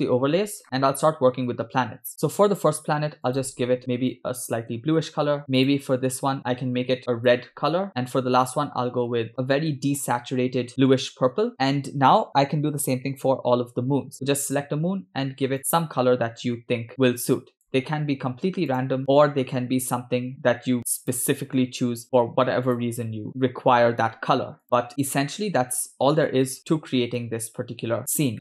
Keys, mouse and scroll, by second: 2.1 click, 3.3 click, 5.7 click, 6.4 click, 8.0 shift+middle click, 8.4 click, 11.5 shift+middle click, 13.0 click, 14.5 click, 18.7 click, 22.0 click, 22.7 click, 25.0 click, 26.5 click, 28.3 shift+middle click.